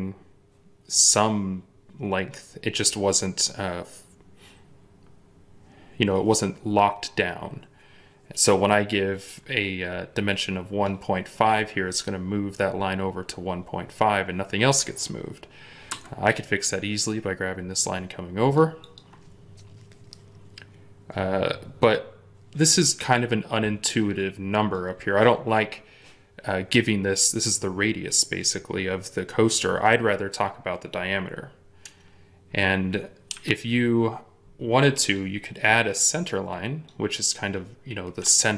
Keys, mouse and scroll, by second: 15.8 Escape, 33.2 Delete.